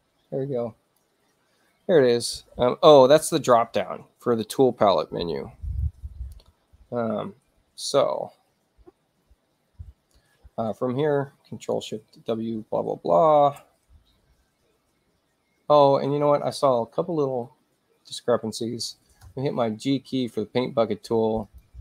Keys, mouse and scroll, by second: 13.5 ctrl+alt+shift+w, 16.5 click, 19.4 g, 21.5 click.